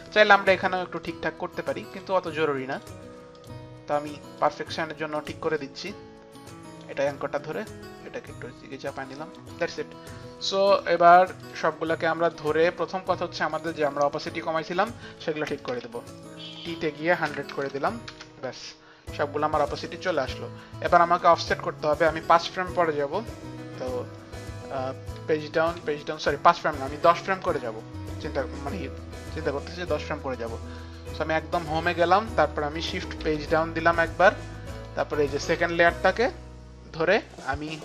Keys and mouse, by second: 0.2 shift+Up, 0.2 shift+Down, 2.2 shift+Up, 2.2 click, 2.8 click, 3.4 click, 4.4 click, 6.4 click, 7.8 click, 11.5 click, 13.6 click, 14.8 shift+click, 15.8 t, 16.5 shift+click, 17.5 click, 17.5 KP_0, 17.5 KP_1, 17.5 t, 18.1 Return, 19.7 click, 21.5 Return, 21.5 click, 21.5 KP_0, 25.2 Page_Down, 25.9 Page_Down, 26.5 Page_Up, 26.5 Page_Down, 29.0 Page_Up, 29.0 Page_Down, 29.6 Page_Up, 29.6 Page_Down, 30.8 click, 33.3 shift+Page_Down, 34.0 shift+Page_Down, 34.0 click, 34.9 shift+Page_Down, 34.9 click, 37.5 click.